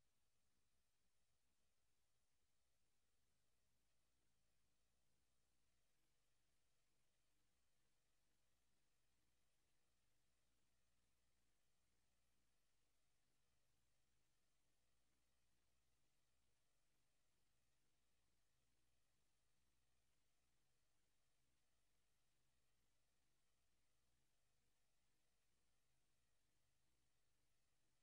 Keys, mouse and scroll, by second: 5.6 click, 6.2 scroll up 1, 7.0 right click, 8.8 right click, 10.1 right click, 11.4 KP_0, 12.8 right click, 15.6 s, 17.0 right click, 17.3 s, 18.4 s, 20.1 right click, 20.5 s, 21.9 click, 22.2 s, 23.1 click, 23.4 right click, 25.3 right click.